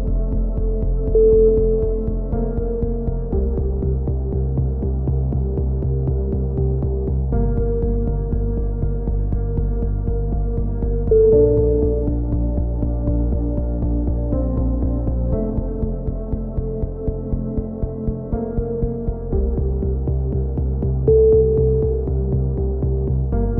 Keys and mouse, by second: 0.1 z, 0.5 s, 2.2 a, 2.8 z, 3.1 click, 3.7 click, 3.7 right click, 4.3 KP_3, 4.8 s, 6.7 a, 6.9 z, 7.2 z, 7.4 click, 8.5 right click, 8.6 click, 9.3 KP_3, 9.5 right click, 9.9 z, 9.9 s, 11.3 a, 11.5 z, 11.6 click, 12.2-13.2 right drag, 12.5 click, 12.8 KP_3, 12.9 z, 13.2 s, 17.2 a, 17.5 z, 17.7 click, 18.7 ctrl+l, 18.7 right click, 19.0 ctrl+n, 19.5 click, 20.5 a, 20.6 z, 21.2 click, 21.8 click, 22.2-23.5 right drag, 22.5 z, 22.6 z, 23.3 x.